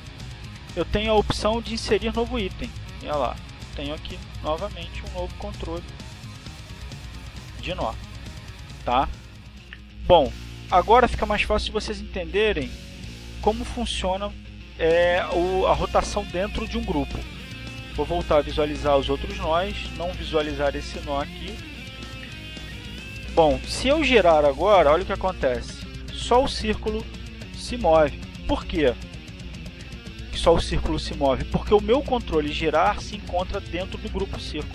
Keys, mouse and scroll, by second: 2.1 right click, 5.1 click, 6.5 click, 7.6 click, 9.0 click, 10.1 click, 14.6 click, 15.1 click, 15.6 click, 21.0 click, 21.5 click, 22.3 click, 23.0 click, 26.0 click, 27.8 click, 28.8 click, 29.5 click, 30.4 click, 31.2 click, 32.4 ctrl+z.